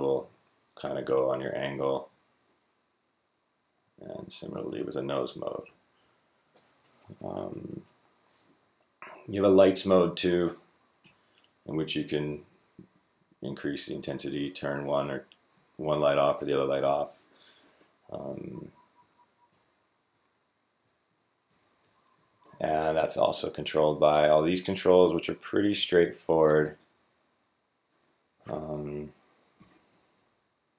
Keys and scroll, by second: 0.1 Up, 0.7-1.6 Up, 1.8-3.0 Up, 1.9 Down, 2.4 Down, 2.6-4.2 Down, 4.0 Down, 10.8 l, 11.5 Up, 11.8 Up, 12.0 Up, 12.1 Up, 12.2 Up, 12.3-14.4 Up, 12.6-13.3 Down, 12.9 Down, 13.0 Down, 13.1 Down, 13.4 Down, 13.5-14.4 Down, 13.9 Right, 14.4 Left, 15.4 Right, 15.8 Left, 18.9 Right, 19.4 Up, 19.9 Left, 20.7 Left, 20.9 Right, 21.4 Up, 21.5 Up, 21.7 Up, 21.9 Down, 22.2 Down, 29.4 b, 30.0 Left, 30.1 Left, 30.3 Left, 30.6 Right.